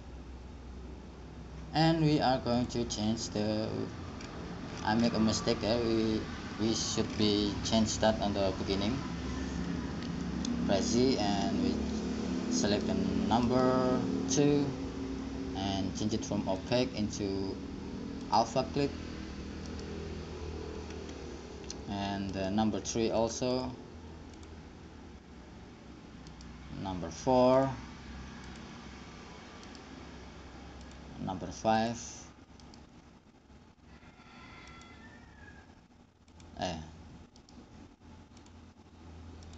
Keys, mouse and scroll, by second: 3.0-5.0 drag, 5.0-10.3 middle drag, 10.3 z, 13.0-15.4 right drag, 15.4-16.8 middle drag, 16.8-18.7 drag, 18.7-19.9 scroll up 1, 19.9 middle click, 19.9-23.8 right drag, 21.6-23.8 middle drag, 25.4-26.5 drag, 26.5-27.8 right drag, 29.6-30.0 scroll up 1, 30.0-31.1 right drag, 32.7 click, 33.0-34.9 right drag, 34.9-36.9 drag, 37.8 right click.